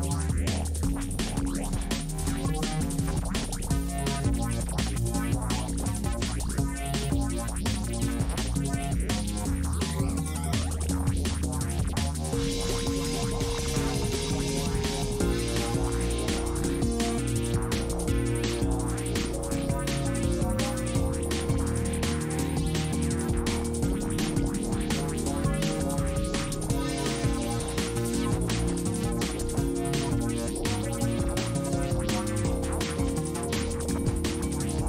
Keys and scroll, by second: 11.1 s.